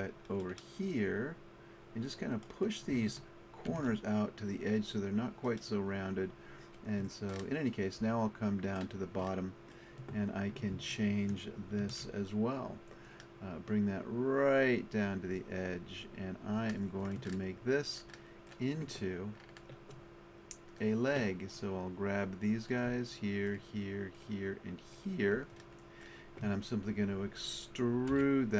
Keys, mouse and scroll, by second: 3.7 ctrl+r, 7.1 click, 9.5-11.4 middle drag, 11.8 ctrl+r, 17.9-19.6 middle drag, 20.7-22.2 middle drag, 28.1 e.